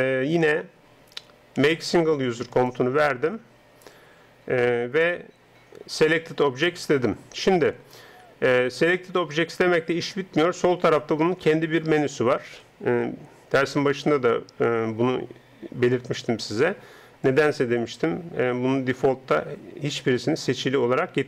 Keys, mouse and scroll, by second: 1.7 space, 17.2-21.2 drag.